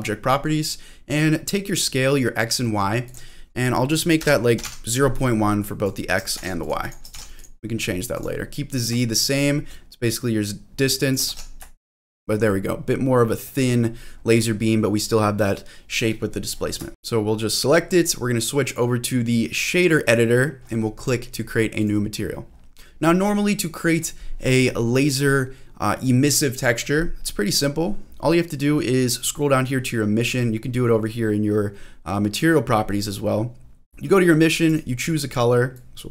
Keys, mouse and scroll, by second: 3.0-6.7 drag, 6.8 ctrl+click, 7.8 scroll up 1, 8.1 click, 9.2 shift+middle click, 10.0-11.1 drag, 11.3 ctrl+z, 11.8 shift+middle click, 12.2-13.1 scroll up 4, 13.3 scroll up 2, 13.4-14.1 scroll down 3, 14.1-14.6 scroll up 2, 14.6 scroll down 1, 14.7-16.0 scroll up 2, 16.0-16.7 scroll down 3, 16.9 click, 17.5 click, 18.6-19.8 drag, 21.8 click, 22.5 scroll up 1, 22.8 shift+middle click, 22.8-23.6 scroll down 2, 24.4-24.7 scroll down 1, 24.7-27.3 scroll up 1, 27.3-27.6 scroll up 2, 27.6-30.4 scroll down 1, 30.4-33.2 scroll down 1, 33.2 scroll down 1, 33.3 scroll down 1, 33.6 scroll up 1, 33.8 scroll down 2, 34.0-34.7 scroll down 1, 34.7 click.